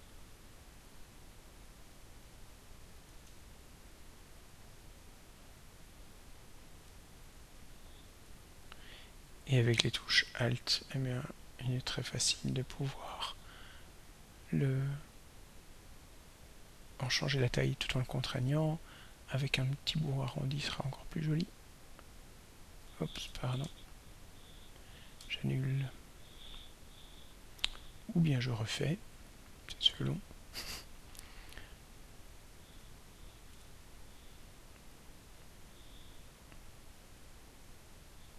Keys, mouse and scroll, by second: 0.9 click, 2.7-7.0 drag, 10.0-17.2 alt+drag, 19.0 click, 20.7-23.2 drag, 23.7 ctrl+y, 25.2 ctrl+y, 29.3 click, 31.0 click, 33.5 Escape, 34.9 click, 35.4 click.